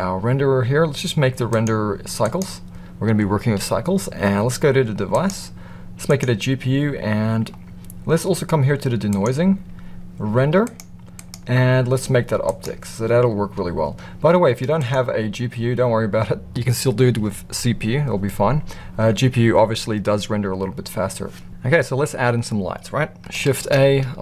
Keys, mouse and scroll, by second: 1.5-2.3 drag, 5.1-6.2 drag, 9.1 click, 10.6 click, 11.2-12.6 drag, 14.8-18.4 drag, 23.5 shift+a.